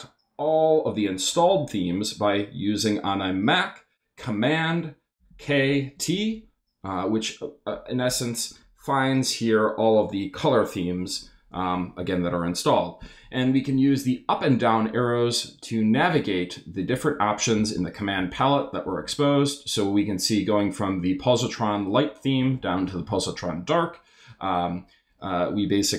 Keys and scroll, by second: 5.2 super+k, 5.7 super+t, 14.8 Down, 16.1 Down, 17.5 Up, 22.4 Down.